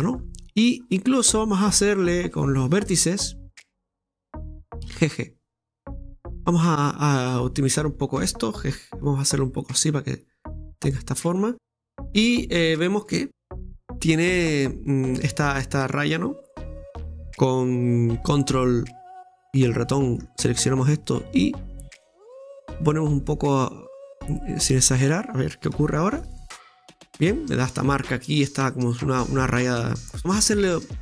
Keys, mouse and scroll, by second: 0.2-2.3 scroll up 8, 2.3-3.8 scroll up 1, 3.8 right click, 3.8 click, 4.8 g, 7.8 right click, 9.6-11.5 drag, 11.5 scroll down 2, 12.1 \, 12.1 Tab, 13.1 middle click, 13.9-15.6 scroll down 2, 16.3-16.7 scroll up 2, 16.7 shift+middle click, 18.8-24.7 ctrl+drag, 26.1-26.5 scroll down 2, 26.5-29.5 middle drag, 29.7-30.2 scroll down 1, 30.2-30.7 scroll up 4, 30.7 Tab.